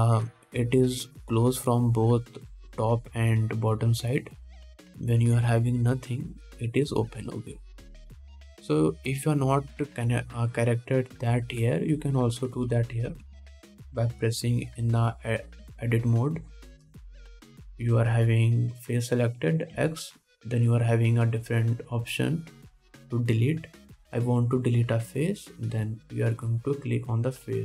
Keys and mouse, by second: 2.5-5.6 middle drag, 8.5-8.9 middle drag, 9.3 middle click, 13.1-27.6 drag, 14.3 Tab, 14.6 alt+a, 16.8 3, 19.7 middle click, 19.7 right click, 21.0 x.